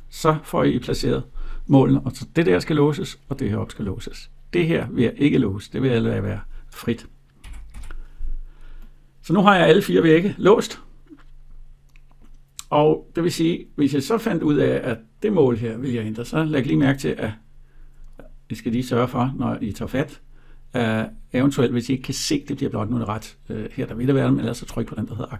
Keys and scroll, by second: 7.1 Escape.